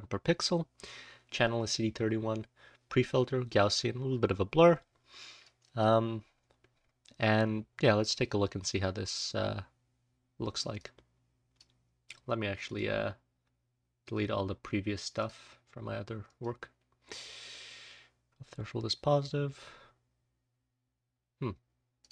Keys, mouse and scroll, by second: 10.7-11.5 drag, 12.6 click, 17.1-17.4 drag.